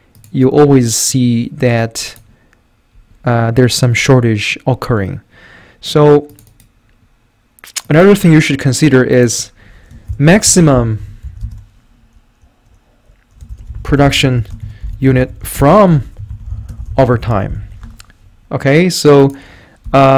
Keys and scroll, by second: 9.9-11.7 typing, 13.3-20.1 typing.